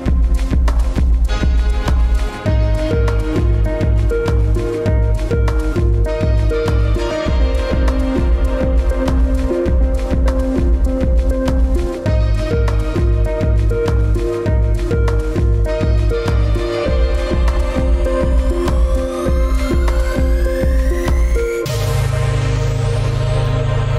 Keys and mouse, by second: 0.4 ctrl+r, 4.0-6.8 middle drag, 8.3 ctrl+r, 14.5 ctrl+r, 19.7-21.6 middle drag, 23.0-23.4 middle drag.